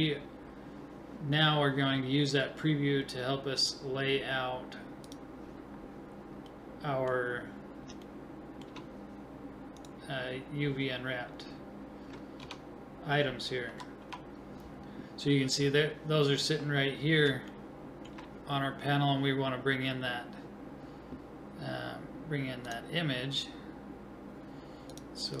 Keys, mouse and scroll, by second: 9.8-11.5 right drag, 12.4 Tab, 13.7 a, 14.0 a, 17.6-22.7 middle drag, 22.7-25.4 drag.